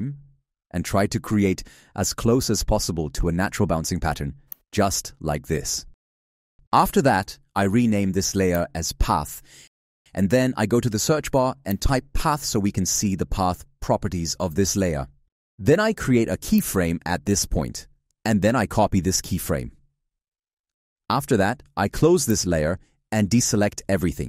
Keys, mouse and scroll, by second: 4.1 shift+/, 19.5 ctrl+c.